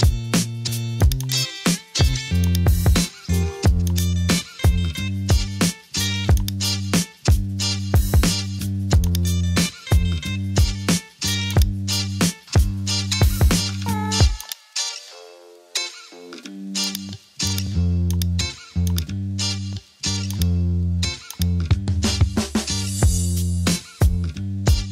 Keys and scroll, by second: 9.4 Return, 22.5 super+e, 23.8 super+a, 24.7 super+j.